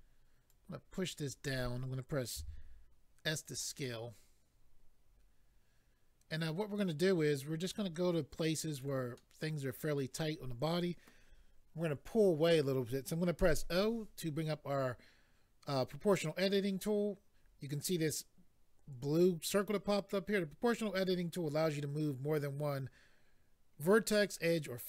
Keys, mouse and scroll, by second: 0.5 click, 2.4 s, 3.4 click, 3.6 click, 3.8 middle click, 7.6 click, 7.7 click, 8.7 click, 8.8 click, 9.2 middle click.